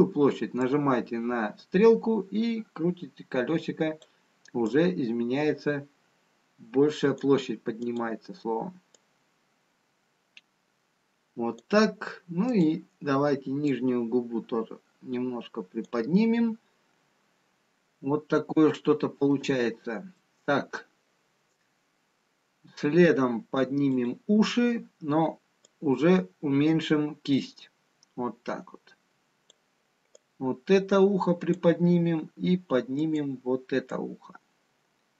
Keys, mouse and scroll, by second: 1.7 click, 5.0 click, 9.9 click, 12.9 click, 14.8 click, 19.2 shift+middle click, 19.2 scroll down 2, 21.4 middle click, 21.4 scroll up 2, 24.7 click, 26.2 click, 31.1 click, 33.9 click.